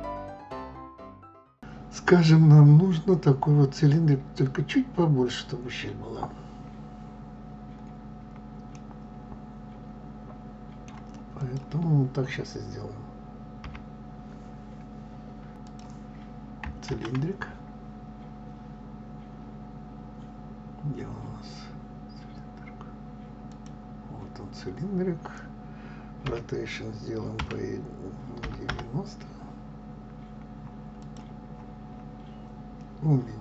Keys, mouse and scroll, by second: 0.7 click, 1.6-6.0 scroll up 3, 8.7-11.5 middle drag, 11.5 click, 13.6 KP_3, 26.4 r, 31.5-32.7 scroll down 8.